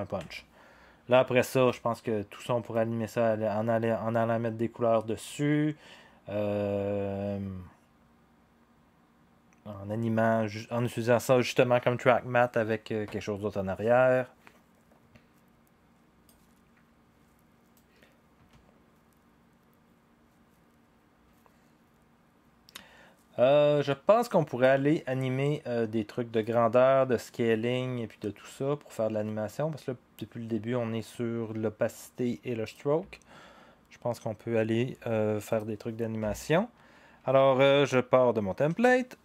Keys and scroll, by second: 0.2 0, 38.7 ctrl+d.